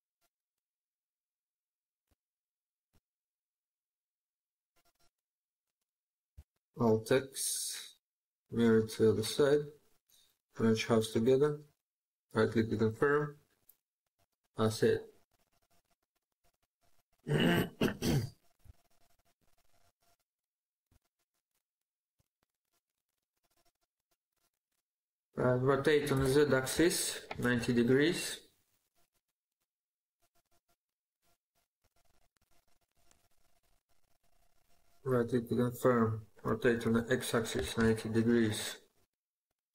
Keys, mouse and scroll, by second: 0.7 scroll up 1, 0.9-1.5 scroll down 1, 2.0 shift+middle click, 6.2 alt+x, 13.9 scroll down 1, 14.3 middle click, 18.1-18.5 scroll down 2, 18.5 shift+middle click, 19.2 shift+scroll up 1, 19.5 middle click, 24.2 4, 26.8-27.8 typing, 31.6-33.4 typing, 34.5 right click, 36.2 typing, 37.6 typing, 38.2 right click.